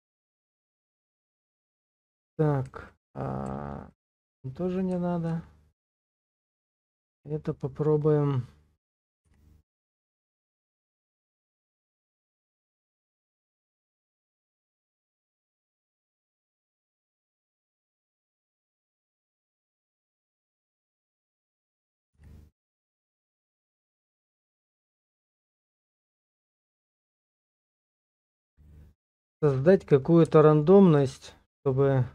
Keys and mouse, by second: 0.3 middle click, 1.1 shift+middle click, 3.6 ctrl+click, 4.4 middle click, 5.8 shift+middle click, 7.1 r, 9.0 click, 9.3 g, 13.7 click, 14.5 r, 16.6-17.8 drag, 17.8-19.5 middle drag, 19.8 shift+z, 20.5 shift+middle click, 22.2 g, 25.0 click, 25.5 shift+z, 26.3-27.4 middle drag, 28.1-29.5 middle drag, 30.1 alt+middle click, 31.4-32.1 drag.